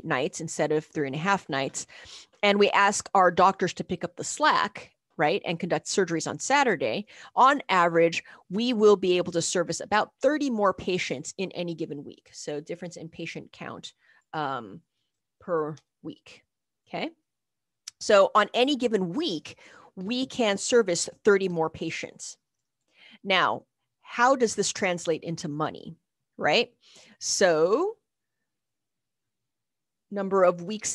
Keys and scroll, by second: 14.9-16.0 typing, 21.8-22.6 typing.